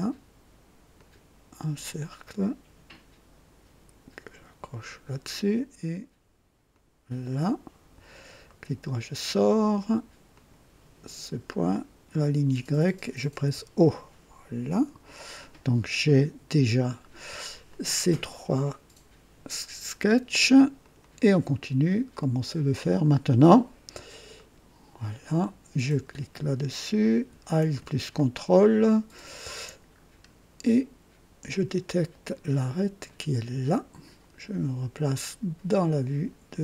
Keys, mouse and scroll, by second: 0.9 click, 4.8 click, 6.7 click, 7.3 right click, 8.4 right click, 10.3 click, 12.1 click, 13.4 o, 14.7 click, 17.7-18.9 right drag, 20.8 click, 22.9 click, 24.3 click, 25.8 click, 28.2-29.5 ctrl+alt+drag, 29.9 scroll up 1, 31.5 click, 33.0 click, 35.2 click.